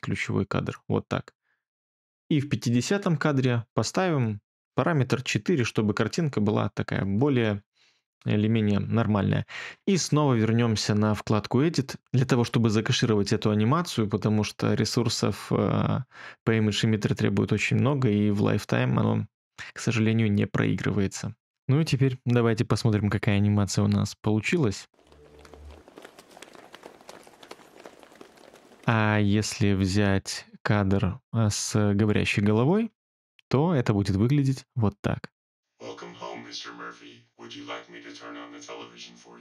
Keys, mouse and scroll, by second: 5.4 4, 5.8 Return, 28.8 space.